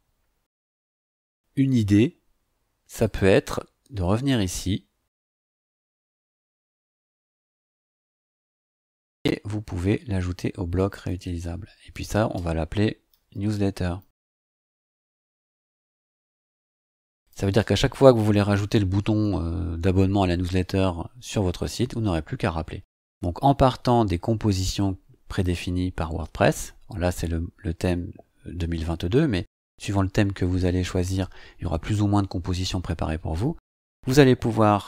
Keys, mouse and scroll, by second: 3.0 click, 7.5 click, 10.7 click, 11.9 click, 12.8-16.3 typing, 17.1 click, 25.2 click.